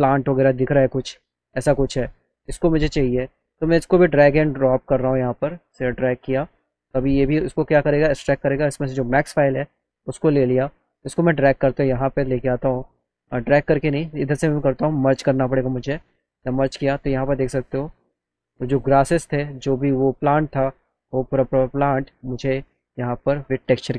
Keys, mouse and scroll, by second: 1.7 click, 2.7 click, 3.5-4.7 drag, 8.9 click, 9.6 click, 11.1-13.1 drag, 14.9 click, 18.4 click, 18.9 middle click, 19.2 alt+click, 20.2 click, 21.0 click, 22.0 click, 23.5 click.